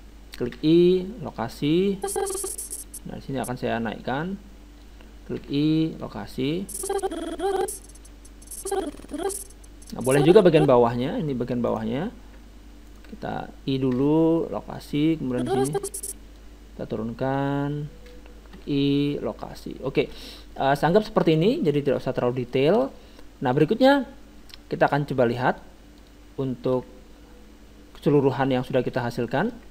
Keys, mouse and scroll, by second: 0.5 i, 2.0-3.7 drag, 4.0-5.7 drag, 5.4 i, 6.6-8.4 drag, 11.7-14.9 right drag, 13.9 i, 15.3-17.3 drag, 17.4-19.1 drag, 18.5 i, 20.1-25.1 middle drag, 23.5-25.4 drag, 26.0-29.7 drag, 26.4-27.8 middle drag, 28.9-29.7 middle drag.